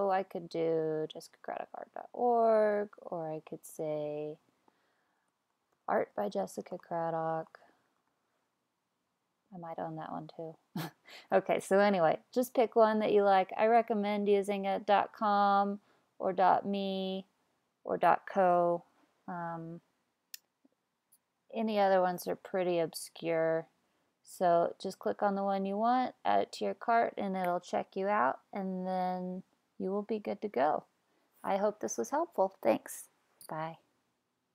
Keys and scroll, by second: 4.7-8.6 typing.